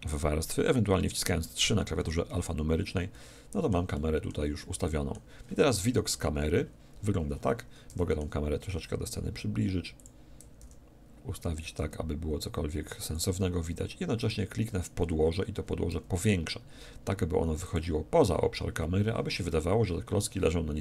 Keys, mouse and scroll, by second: 1.4 3, 3.1-6.5 middle drag, 7.9 g, 10.0-11.7 drag, 10.6 g, 13.1-14.1 drag, 14.1 middle click, 14.2 click, 14.2-15.9 right drag, 15.9 s, 17.7-19.5 drag.